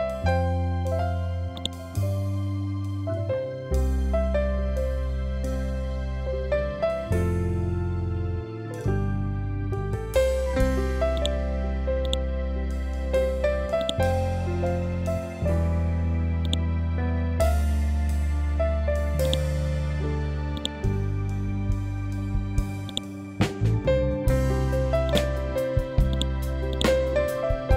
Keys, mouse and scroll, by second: 2.7 7, 4.3 BackSpace, 4.5 5, 4.9 Tab, 5.8 5, 6.2 Tab, 10.8 Tab, 11.1 click, 12.6 scroll down 1, 13.7 click, 15.0 scroll up 1, 16.3-19.1 drag, 19.1-25.0 drag, 25.0 right click, 26.0-27.7 drag.